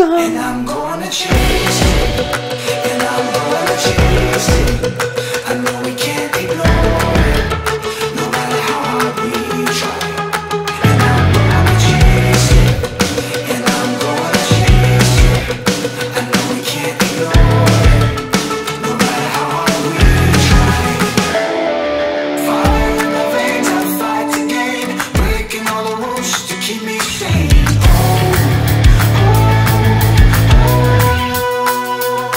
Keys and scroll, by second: 2.3 Page_Up, 2.5 Page_Down, 2.7 Page_Down, 3.2 Page_Down, 3.4 Page_Down, 3.9 Page_Down, 4.6 Page_Up, 4.6 Page_Down, 4.8 Page_Up, 5.6 Page_Up, 5.7 Page_Down, 6.9 Page_Up, 7.0 Page_Down, 7.0 Page_Up, 7.1 Page_Down, 7.5 Page_Up, 7.6 Page_Down, 7.8 Page_Up, 7.9 Page_Down, 8.9 Page_Up, 8.9 Page_Down, 9.9 Page_Up, 10.0 Page_Down, 10.1 Page_Up, 10.1 Page_Down, 10.2 Page_Up, 10.3 Page_Down, 11.3 Page_Down, 12.0 Page_Down, 12.7 Page_Down, 13.0 Page_Down, 13.2 Page_Down, 13.4 Page_Down, 13.7 Page_Down, 14.1 Page_Down, 14.4 Page_Up, 14.6 Page_Down, 15.0 ctrl+z, 15.1 Page_Up, 15.2 Page_Down, 15.3 Page_Up, 15.3 Page_Down, 15.6 Page_Up, 15.8 ctrl+z, 16.0 Page_Up, 16.1 Page_Down, 16.4 Page_Up, 16.5 Page_Down, 16.8 ctrl+z, 17.2 Page_Up, 17.3 Page_Down, 17.5 Page_Up, 18.0 Page_Down, 18.5 Page_Down, 18.7 Page_Down, 18.8 Page_Down, 19.3 ctrl+z, 19.4 Page_Down, 19.5 Page_Up, 19.8 Page_Down, 20.1 ctrl+z, 20.3 Page_Up, 20.4 Page_Down, 20.5 Page_Down, 20.7 Page_Down, 20.9 Page_Down, 21.0 Page_Down, 21.9 Page_Down, 22.1 Page_Up, 22.2 Page_Down, 22.5 Page_Up, 22.6 Page_Down, 23.1 Page_Down, 23.6 Page_Down, 24.4 Page_Down, 24.9 Page_Down, 25.2 Page_Down, 25.3 Page_Up, 25.4 Page_Down, 26.3 Page_Down, 26.4 Page_Up, 26.5 Page_Down, 26.8 Page_Down, 26.8 Page_Up, 26.9 Page_Down, 27.4 Page_Up, 27.5 Page_Down, 27.9 Page_Down, 28.3 Page_Down, 28.7 Page_Down, 29.3 Page_Down, 29.3 Page_Up, 29.4 Page_Down, 29.8 Page_Up, 29.8 Page_Down, 30.1 Page_Up, 30.3 Page_Up, 30.4 Page_Down, 30.9 Page_Down, 31.1 Page_Down, 31.4 Page_Down, 31.8 Page_Up, 31.8 Page_Down, 32.3 Page_Up, 32.3 Page_Down.